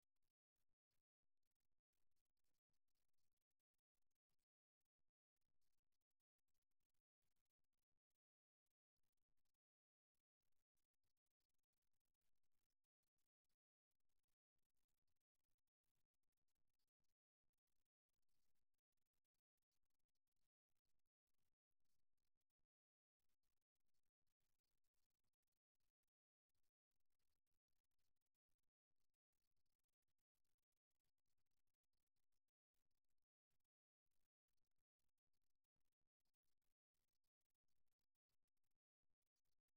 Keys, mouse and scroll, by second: 0.7 middle click, 2.5 right click, 5.4-7.2 right drag, 8.0-9.9 right drag, 10.5-12.4 middle drag, 12.4-14.1 right drag, 15.4-22.2 middle drag, 24.0 ctrl+r, 26.3 right click, 28.2-29.6 middle drag, 30.9 middle click, 33.2-37.4 middle drag, 38.2-39.7 middle drag.